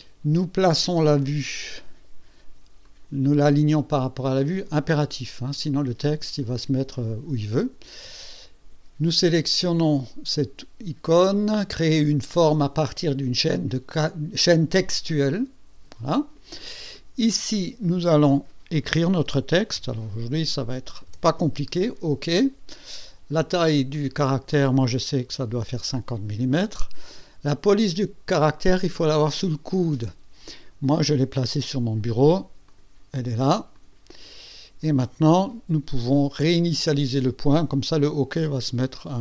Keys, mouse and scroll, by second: 1.2 click, 2.9 click, 15.2 click, 17.5 click, 19.8 shift+o, 21.1 shift+k, 23.9 click, 25.2 KP_5, 25.6 KP_0, 28.3 click, 30.9 click, 32.7 click, 33.7 click, 38.4 click.